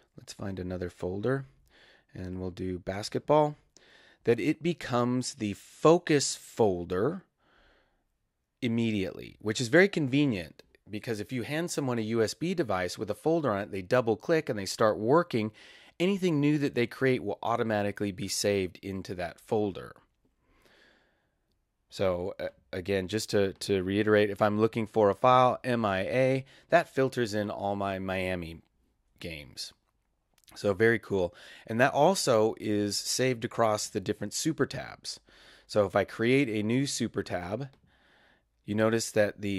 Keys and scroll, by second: 25.1-26.3 typing.